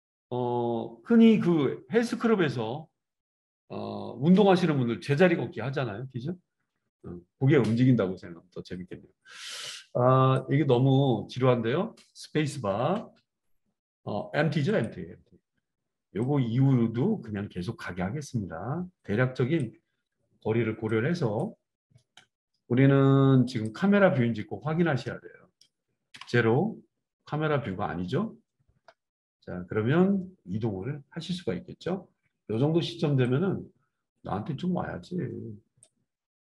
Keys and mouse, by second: 9.7-14.8 drag, 12.8 space, 14.8-16.3 middle drag, 16.3-20.1 drag, 20.1-23.7 right drag, 23.7-33.3 middle drag, 26.1 KP_0, 28.1 KP_0, 33.3-36.4 drag.